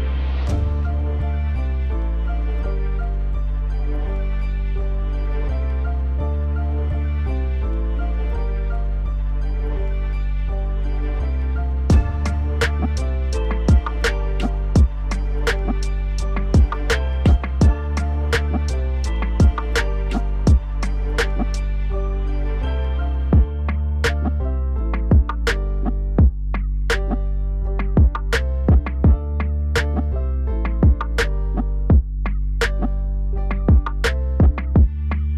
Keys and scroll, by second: 14.8 alt+w.